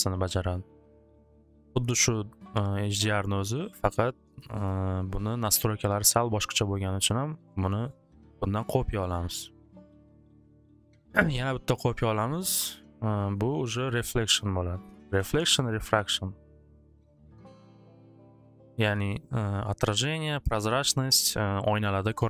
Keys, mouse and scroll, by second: 1.6 click, 2.4 click, 2.8 click, 4.4 click, 4.6 click, 9.1 click, 9.4 click, 11.5 click, 12.9 click, 14.0-15.8 typing, 17.4-19.4 typing, 20.0 click, 21.1-22.2 drag, 21.1 typing.